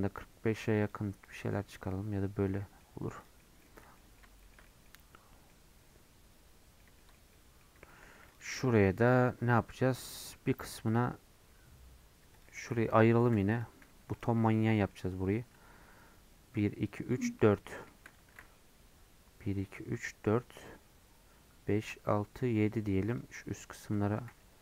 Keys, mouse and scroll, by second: 1.5-2.9 middle drag, 2.9 scroll down 1, 3.4 middle click, 3.8 scroll down 1, 4.0 middle click, 4.9-5.3 scroll up 2, 5.3 scroll down 1, 5.5-7.2 middle drag, 7.2-7.9 scroll up 3, 7.3 middle click, 7.9 shift+middle click, 8.3 click, 8.6 middle click, 8.9 Tab, 9.6-11.0 middle drag, 11.0 click, 11.2-12.2 scroll up 1, 12.2 3, 12.4 click, 13.6 p, 13.9 Tab, 14.1 click, 14.6 scroll up 2, 14.8 middle click, 15.2 Tab, 17.7 middle click, 18.3 ctrl+r, 24.2 ctrl+r.